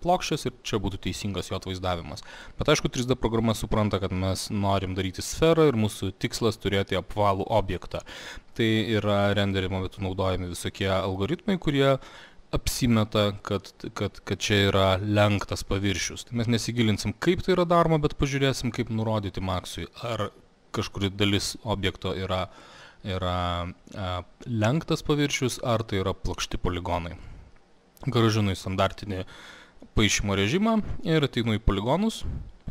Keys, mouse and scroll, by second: 27.3 click, 28.2 click, 31.5 click.